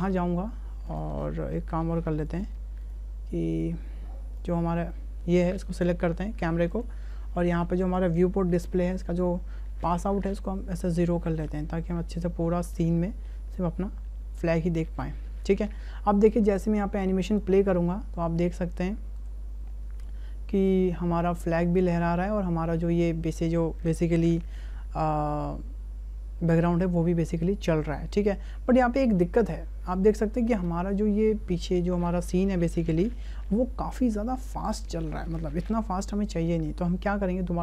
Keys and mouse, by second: 0.0 click, 3.5 click, 4.4 click, 6.7 click, 7.8 click, 9.9-11.1 drag, 12.6 shift+click, 12.7 shift+middle click, 15.5 n, 16.6 click, 20.1 space, 30.6 space, 35.7 click.